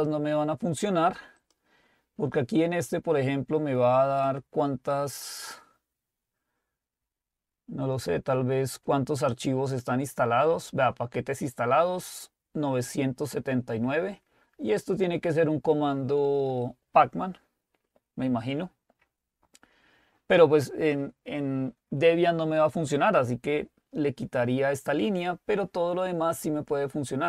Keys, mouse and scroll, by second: 0.2 click, 1.4 click.